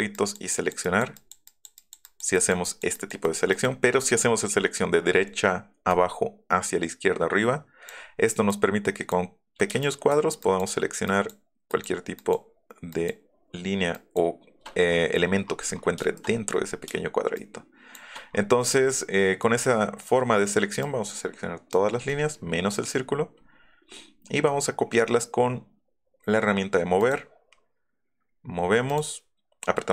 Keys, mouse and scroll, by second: 0.1 click, 0.5 click, 0.8 click, 1.1 click, 1.4 click, 1.7 click, 2.0 click, 2.3 click, 2.6 click, 2.9 click, 3.2 click, 3.5 click, 5.9 click, 6.5-7.9 right drag, 8.5 click, 9.8 shift+click, 10.4 shift+click, 11.1 shift+middle click, 11.7 shift+middle click, 12.1 shift+middle click, 12.9 shift+click, 13.9 shift+click, 17.3 shift+middle click, 18.5 middle click, 20.8 click, 22.8 middle click, 23.0 middle click, 23.4 middle click, 24.0 middle click, 24.3 middle click, 27.0 click, 28.9 click.